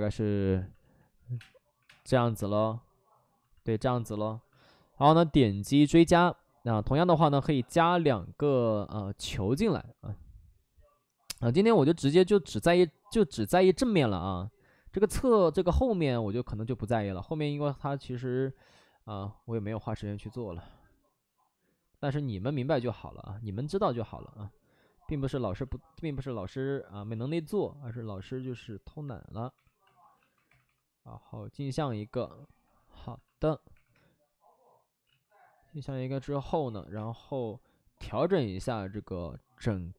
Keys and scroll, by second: 0.4-2.0 typing, 9.4 w, 29.5 2, 30.4 2, 30.6 2, 31.7 2, 33.6 2, 33.8 3, 33.9 3, 35.0 ctrl+z, 36.9 space, 37.9 space, 38.5 space.